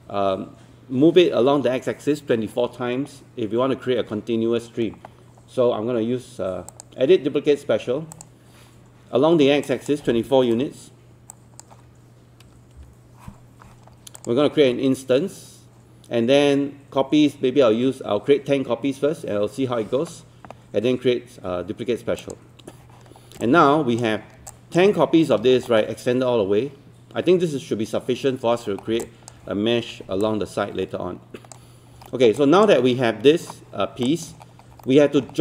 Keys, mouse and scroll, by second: 6.7-12.4 drag, 12.5 KP_2, 14.2 click, 23.2 scroll down 1, 23.5 click, 24.3 scroll down 1, 24.5 alt+click, 24.9 alt+middle click, 25.5 scroll down 1, 25.7 alt+middle click, 28.8 scroll down 1, 29.1 alt+click, 30.2-31.5 alt+drag, 31.7 scroll up 1, 32.1 alt+middle click, 32.4 alt+click, 34.1 alt+click, 34.4 scroll up 1, 34.9 alt+middle click, 35.3-35.4 scroll down 1.